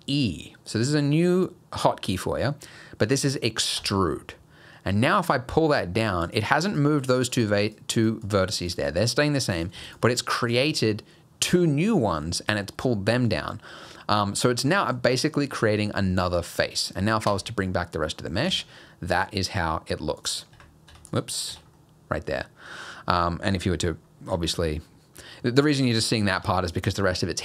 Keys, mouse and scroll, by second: 3.8 e, 6.7 click, 7.3 click, 7.6 click, 8.0 click, 8.2 click, 8.6 click, 9.6 click, 9.9 shift+click, 12.7 middle click, 14.7 middle click, 17.3 Tab, 17.7 middle click, 18.1-18.5 scroll down 3, 18.5 alt+a, 18.8 middle click, 20.2 click, 20.5 Tab, 20.9 Tab, 21.1 click, 21.5 Tab, 21.8 middle click, 22.7 scroll up 1, 24.4 Tab, 25.5 middle click, 26.4 Tab.